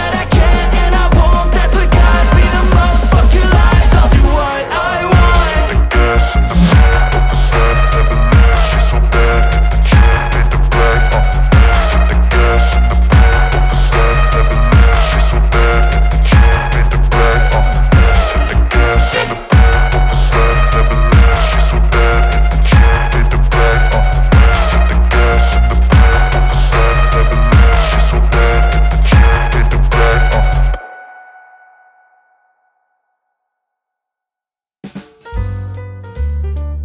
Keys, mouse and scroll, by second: 0.0-9.1 typing, 0.0 click, 0.7 click, 1.3 click, 2.1 click, 2.7 click, 3.0 click, 3.5 click, 4.3 click, 5.0 click, 6.2 click, 7.4 click, 8.0 click, 8.7 click, 11.1 z, 11.2 click, 14.6 ctrl+e, 16.4 click, 22.6 click, 29.2 v, 29.3 click, 33.0 click.